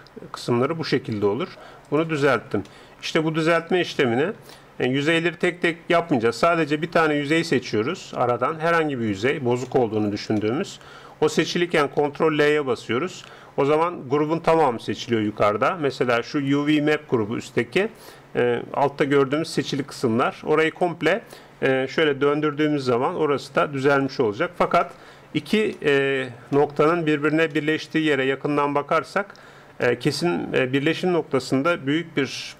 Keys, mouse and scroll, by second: 2.7-6.5 middle drag, 7.1-9.6 right drag, 9.8-15.1 middle drag, 12.0 ctrl+l, 15.3 a, 18.2-23.9 middle drag, 22.1 r, 24.5-29.3 middle drag, 30.0-32.5 middle drag.